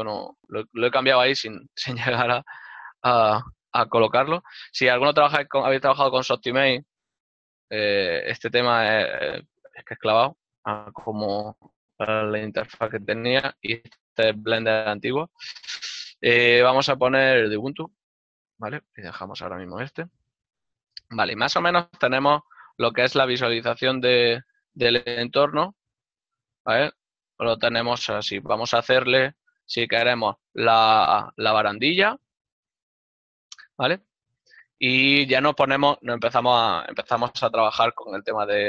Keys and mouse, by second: 27.1 middle click, 30.7 n, 31.1 ctrl+middle click, 37.3 right click, 37.5 Tab, 38.5 click.